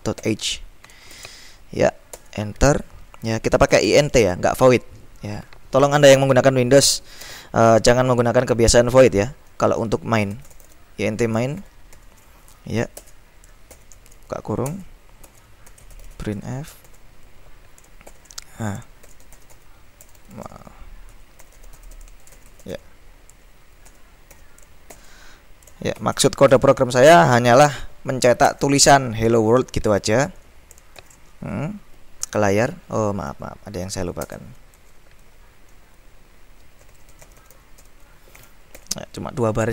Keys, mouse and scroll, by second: 0.0-1.1 typing, 2.2 Return, 3.6-4.6 typing, 7.3 space, 10.2-12.0 typing, 13.1 Return, 13.9 shift+[, 14.7 Return, 15.4 Tab, 15.6-26.6 typing, 28.6 Return, 31.1 shift+], 32.8 Up, 33.4 End, 34.3 Return, 34.8 Tab, 36.7-38.9 typing, 39.6 Escape.